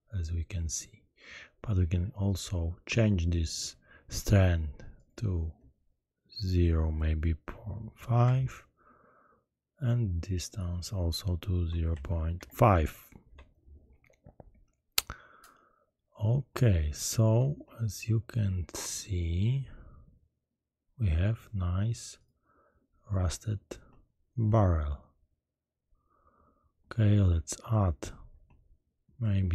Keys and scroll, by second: 6.8 0, 7.6 ., 8.2 5, 8.3 Return, 11.9 ., 12.3 5, 13.2 Return.